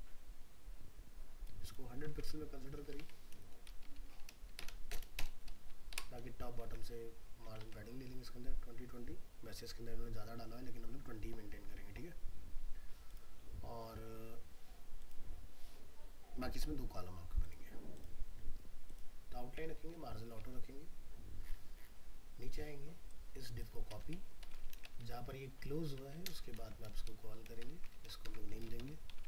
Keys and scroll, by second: 2.1 alt+Tab, 6.7 alt+Tab, 24.7 ctrl+c, 26.6 ctrl+v, 27.6 ctrl+shift+Left.